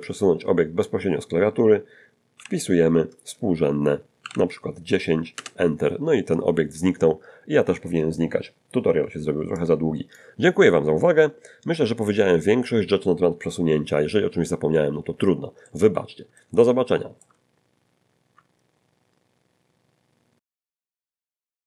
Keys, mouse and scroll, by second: 0.8 scroll down 2, 2.4 g, 4.2 1, 4.3 0, 5.4 Return, 9.6 click, 15.7-17.4 middle drag.